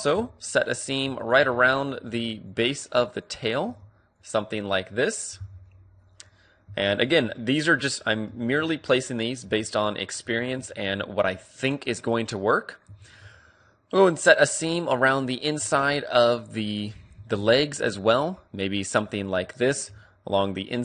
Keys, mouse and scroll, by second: 0.0-3.3 middle drag, 0.8-6.0 right drag, 5.4 b, 7.0-8.4 right drag, 7.3-8.4 middle drag, 8.4 ctrl+e, 8.4 click, 8.8-15.3 middle drag, 10.2 a, 16.6-18.1 right drag, 17.1 a, 18.1-19.6 middle drag.